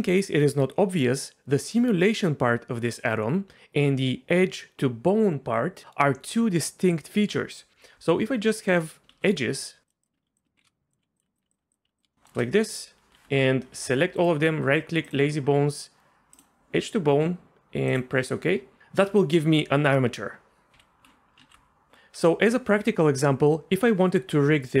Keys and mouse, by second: 9.1 shift+a, 10.1 Tab, 10.2-11.8 typing, 10.6 ctrl+i, 11.2 click, 11.3 click, 11.5 click, 11.7 click, 12.0 click, 12.3 shift+click, 13.1 2, 13.7 a, 14.2-18.0 drag, 20.7 ctrl+z, 21.5 ctrl+z.